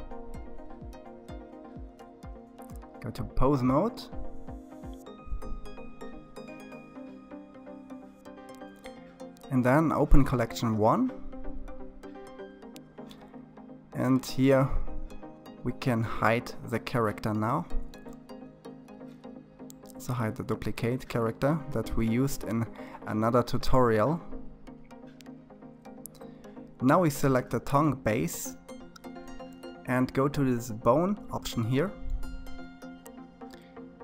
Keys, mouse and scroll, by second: 1.7-2.8 drag, 2.8 middle click, 4.7-5.7 middle drag, 5.7-6.7 scroll up 1, 6.7-13.4 middle drag, 13.4 click, 15.2-17.0 middle drag, 17.0 scroll up 2, 17.6-19.3 shift+middle drag, 19.3 click, 20.8-21.4 scroll up 3, 21.4 shift+middle click, 22.3 scroll down 1, 22.6-24.8 scroll up 12, 24.8-25.7 scroll up 10, 25.7-26.1 scroll up 1, 26.4 click.